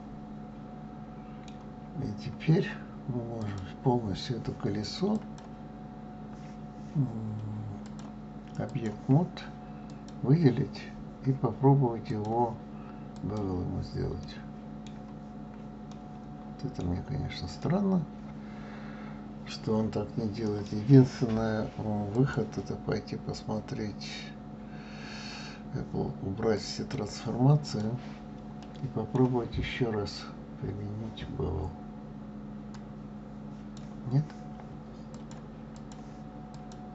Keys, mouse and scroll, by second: 2.1 scroll up 1, 2.8 scroll down 2, 3.3 click, 5.1 click, 7.8-10.1 drag, 12.1-14.2 drag, 14.2-15.3 middle drag, 15.3-15.9 scroll up 2, 15.9-20.6 middle drag, 22.1-25.1 drag, 27.6 click, 28.6-31.6 middle drag, 32.8-36.7 drag.